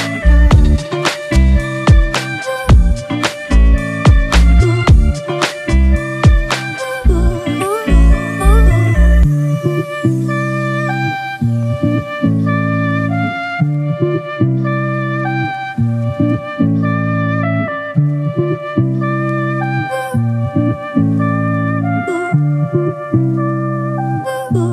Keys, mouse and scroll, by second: 4.6-7.0 scroll up 1.